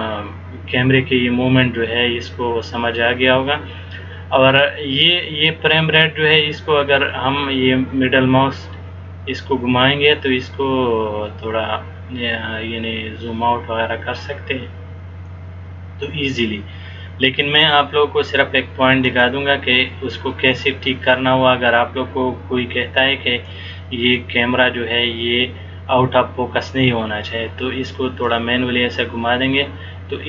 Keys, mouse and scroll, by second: 6.9-7.5 scroll down 3, 7.4 scroll up 4, 8.2-8.7 scroll up 6, 9.5 scroll up 1, 10.0-10.7 scroll up 5, 11.0-11.3 scroll up 4, 12.3 scroll up 1, 19.2 click, 20.8 click, 24.3 click.